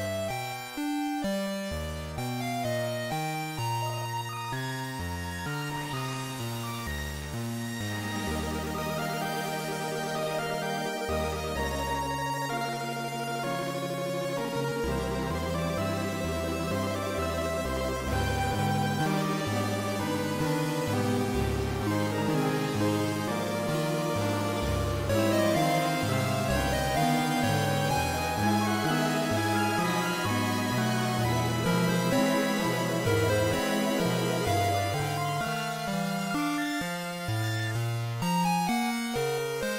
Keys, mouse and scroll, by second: 0.1 right click, 2.2 click, 6.5 z, 9.5 right click, 11.3 right click, 28.5 click, 38.5 r.